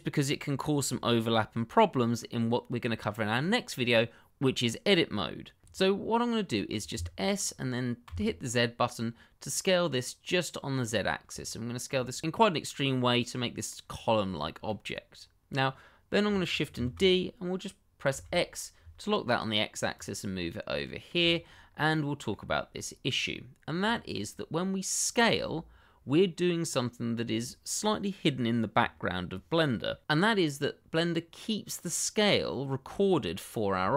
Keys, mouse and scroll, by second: 6.9 s, 8.0 z, 10.5 click, 11.0 shift+middle click, 11.6 scroll down 1, 11.9 middle click, 13.9-14.3 scroll up 1, 14.3 shift+middle click, 16.7 shift+d, 18.1 x, 19.9 click, 20.3 middle click, 21.6-21.9 scroll up 1, 21.9 middle click, 22.7 shift+middle click, 23.0 scroll down 1, 23.3 middle click, 23.9 shift+middle click, 24.0 middle click, 24.1 shift+middle click, 24.2 scroll up 1, 25.1 click.